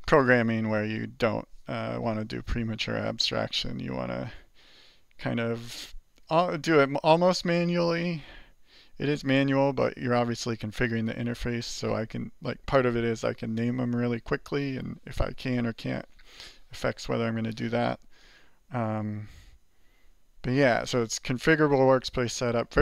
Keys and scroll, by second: 19.0 alt+q.